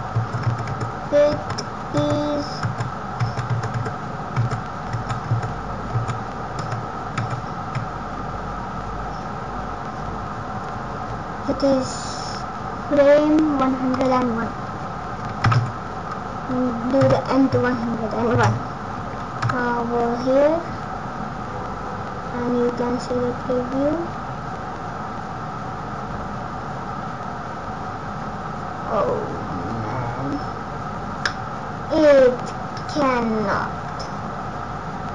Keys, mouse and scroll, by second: 0.3 Right, 0.8-7.3 Right, 13.9 click, 18.3 space, 19.3 KP_0.